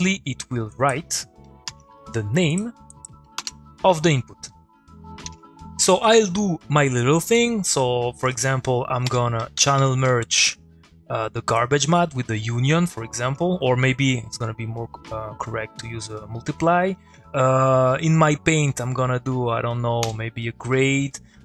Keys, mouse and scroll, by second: 0.7 click, 2.5 click, 6.3 middle click, 8.3 click, 9.1 Tab, 9.1-10.2 typing, 10.3 Down, 10.4 Return, 12.6 middle click, 12.7 click, 20.0 g, 20.5 middle click, 21.0 click.